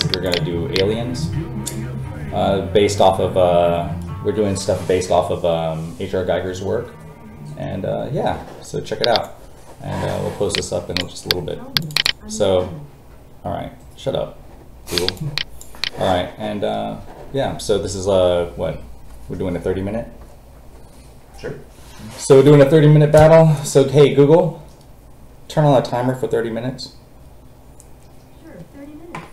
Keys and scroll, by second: 0.0 space, 2.2 space.